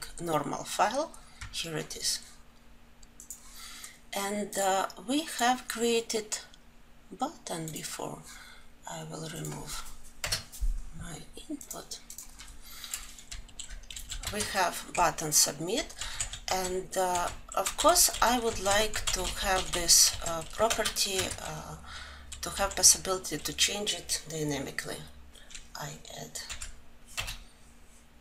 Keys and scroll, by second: 12.0 Delete, 14.2 Delete.